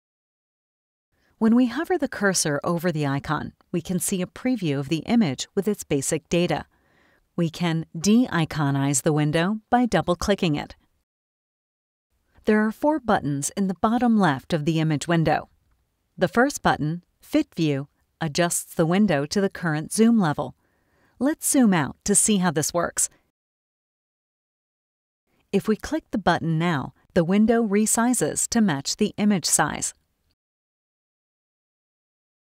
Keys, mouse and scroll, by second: 9.8 click, 22.7 scroll up 1, 23.0-24.5 scroll down 2, 26.9 click, 29.8 middle click, 29.9-31.1 scroll down 1, 31.2 middle click, 31.2 scroll down 1, 32.0 click.